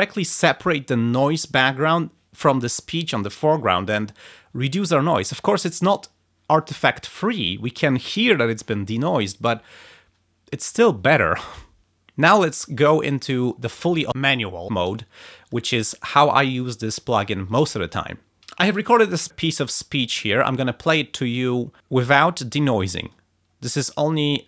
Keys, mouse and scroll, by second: 13.0 click, 13.7 click, 15.4 click, 16.2 click, 17.4 click, 18.0 click, 18.6 ctrl+scroll down 2, 19.6 click, 20.2 ctrl+scroll down 2, 20.8 ctrl+scroll up 2, 22.9 click.